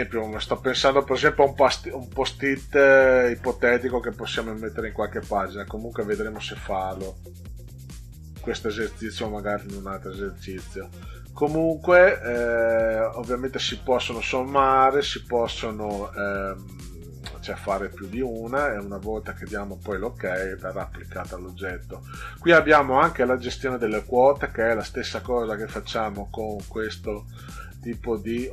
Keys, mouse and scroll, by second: 12.3-12.6 drag, 19.2 click, 19.9 click, 24.4 right click.